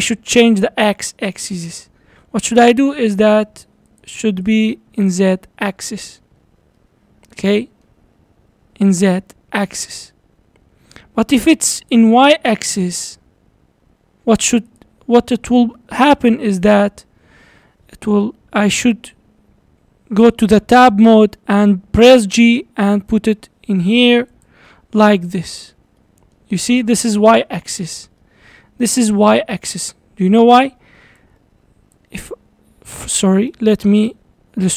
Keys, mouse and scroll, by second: 3.0 click, 3.9 click, 4.5 click, 5.0 click, 5.7-6.4 middle drag, 6.4-6.8 scroll down 6, 6.8-8.8 middle drag, 8.8-9.1 scroll down 3, 9.1-11.8 middle drag, 11.8 click, 14.7 click, 15.5 scroll up 4, 16.0-19.1 middle drag, 20.3 Tab, 21.6 g, 24.7 middle click, 25.5 Tab, 25.7-26.0 scroll down 4, 26.0-26.6 middle drag, 26.6-27.0 scroll up 4, 27.5-30.7 shift+middle drag, 30.7 d, 31.2-32.0 drag, 32.0 d, 32.3 d, 33.4-34.7 typing, 33.6 right click.